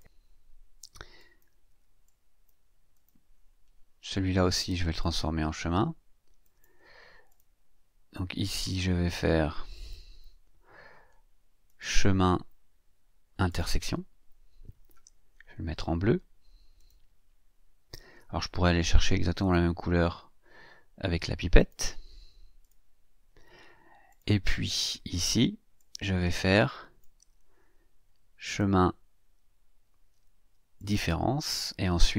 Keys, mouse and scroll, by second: 1.2 click, 2.0 click, 2.9 click, 5.0 click, 6.4 click, 7.3 click, 8.1-10.1 drag, 11.6 click, 13.5 click, 16.8 click, 19.4 click, 21.6 click, 22.6 click, 24.1 click, 25.1 click, 25.8-27.2 drag, 28.4 click, 30.8 click.